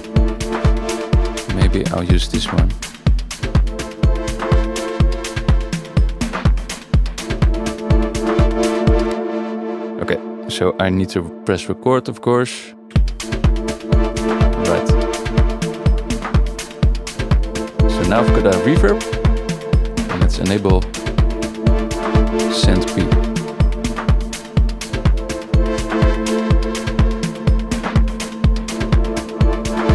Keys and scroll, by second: 9.1 space, 12.9 F9, 14.2 Tab.